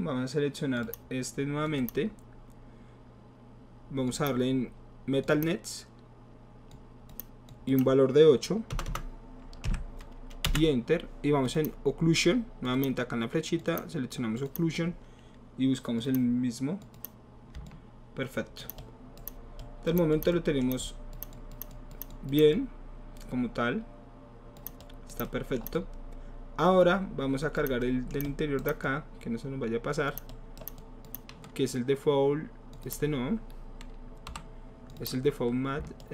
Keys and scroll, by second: 8.7 BackSpace, 8.9 BackSpace, 9.6 KP_8, 10.4 Return, 34.3 Delete.